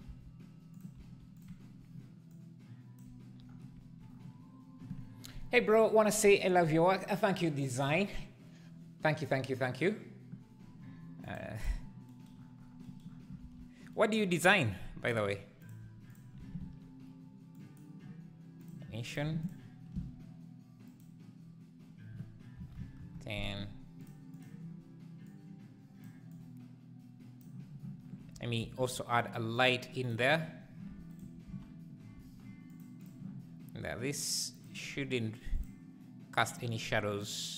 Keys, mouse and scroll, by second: 1.0 s, 2.3 click, 11.6-15.7 drag, 15.8 x, 16.1 click, 18.7 shift+a, 19.5 ctrl+shift+click, 22.9-24.0 drag, 25.2 click, 30.1 shift+a, 31.1-31.6 shift+right drag, 31.6 shift+s, 32.1 g, 33.0 click, 34.3-34.8 drag, 34.8-37.5 scroll down 1.